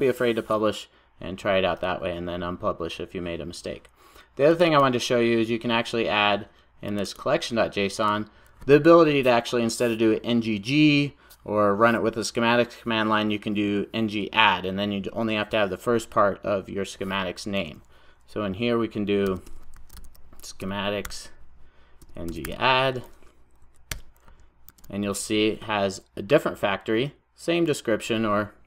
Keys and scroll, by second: 23.9 Return, 24.7 super+s.